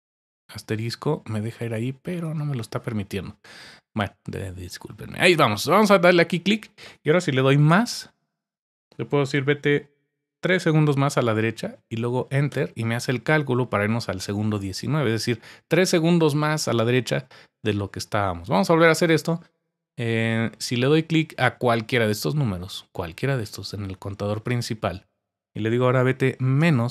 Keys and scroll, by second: 7.7 typing, 10.6 typing, 12.2-13.0 typing.